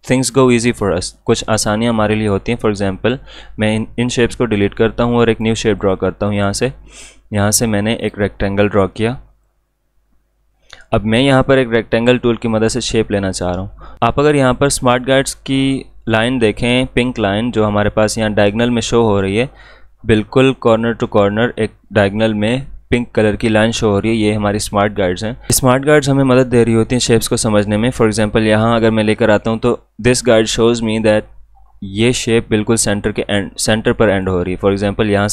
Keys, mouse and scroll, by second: 2.3-5.1 drag, 5.3 click, 5.8 right click, 8.0 click, 9.4-15.2 shift+drag.